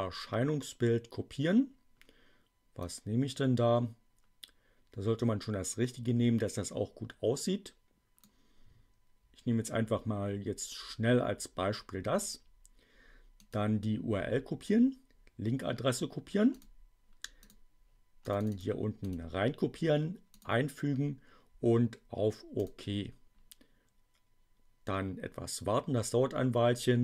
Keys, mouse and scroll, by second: 2.8-8.3 drag, 13.3 right click, 16.5 click, 17.4 click, 18.2 click, 19.0 right click, 20.3 click, 22.5 click.